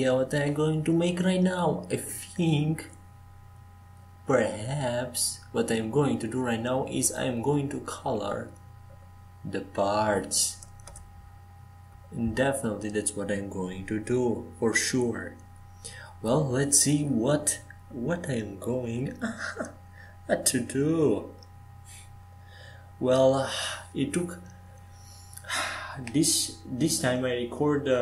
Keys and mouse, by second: 18.5 ctrl+s, 20.0 Tab, 26.1-27.6 drag, 26.1 shift+a.